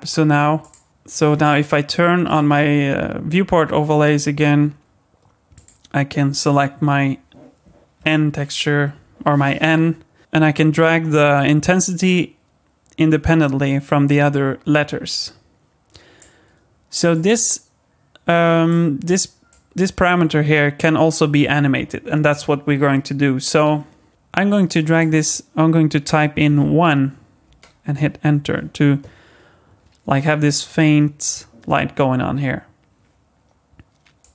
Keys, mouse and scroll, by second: 0.6 click, 1.4 click, 2.3 click, 5.5 click, 17.1 click, 19.5 click, 24.1 click, 34.2 click.